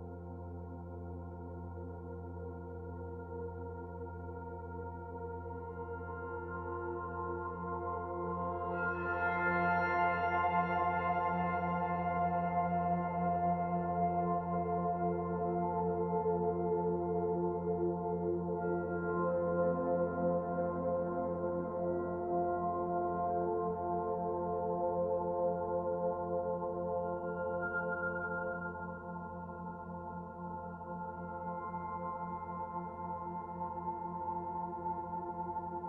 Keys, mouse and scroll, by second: 0.4 middle click, 2.0 shift+middle click, 3.4 middle click, 5.6-5.9 scroll up 4, 6.0 shift+middle click, 6.6 scroll up 1, 6.9 middle click, 7.8-8.1 scroll down 2, 8.1 middle click, 8.8 scroll down 1, 9.6 click, 9.6 scroll down 1, 10.3 shift+click, 11.1-11.9 scroll up 1, 12.0 s, 14.7 middle click, 16.5 click, 18.2 middle click, 18.6 middle click, 19.9 s, 22.3 middle click, 23.5 click, 25.8 middle click, 27.1 middle click, 30.6-31.5 scroll up 3, 31.5 shift+middle click, 32.2 middle click, 32.8-33.3 scroll down 2, 33.5 shift+middle click, 34.1 middle click, 35.0 middle click.